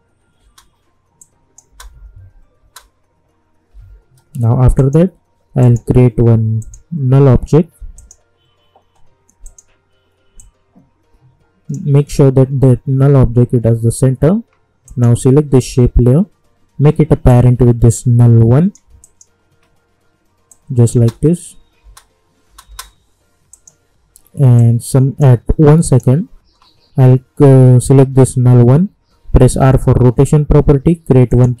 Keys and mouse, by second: 1.2 click, 1.6 space, 3.7 k, 4.7 click, 5.6 right click, 6.6-14.1 drag, 14.8 click, 17.2-20.9 drag, 20.9 space, 23.5 click, 29.4 r, 31.3 click.